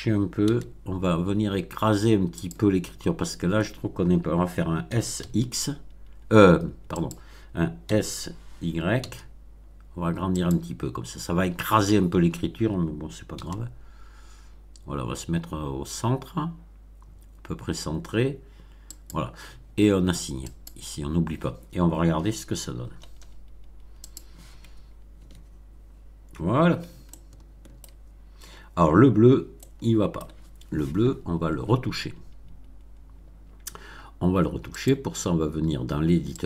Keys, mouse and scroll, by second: 0.4 g, 2.3 click, 4.8 s, 5.1 x, 6.9 click, 7.8 s, 8.9 y, 10.3 click, 13.3 g, 18.9 click, 20.4 click, 22.7-23.4 scroll down 4, 24.0 click, 25.1 Tab, 25.8-26.3 scroll up 2, 27.0-28.0 shift+middle drag, 28.9 scroll up 1, 29.5-30.3 shift+middle drag, 34.7 click, 36.3 click.